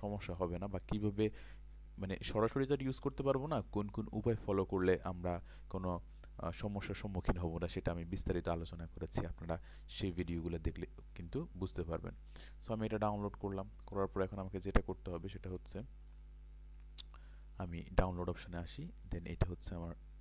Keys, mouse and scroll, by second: 18.9 right click.